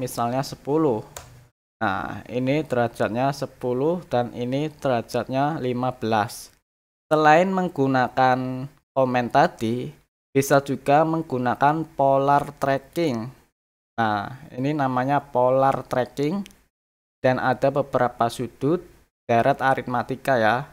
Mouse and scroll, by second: 12.9 click.